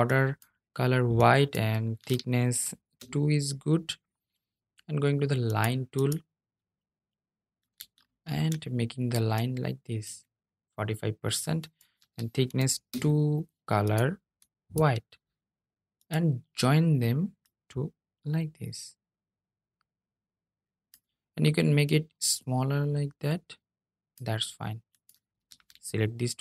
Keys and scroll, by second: 25.5 super+c, 25.7 super+c.